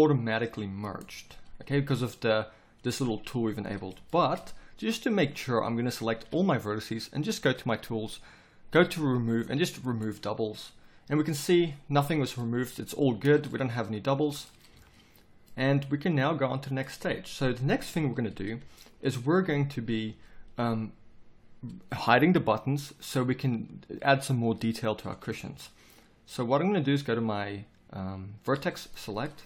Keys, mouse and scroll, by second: 4.1 middle click, 5.8 a, 6.2 a, 13.2 z, 14.7 z, 17.9 KP_7, 29.3 middle click.